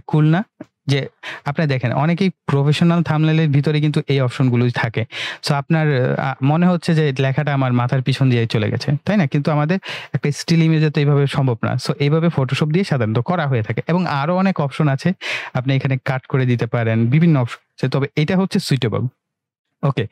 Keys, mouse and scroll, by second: 0.9 typing.